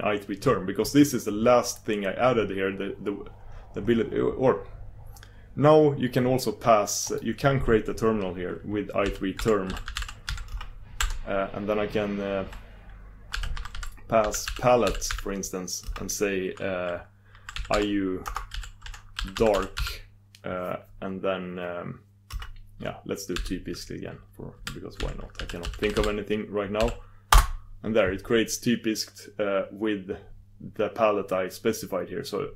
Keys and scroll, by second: 27.5 super+d.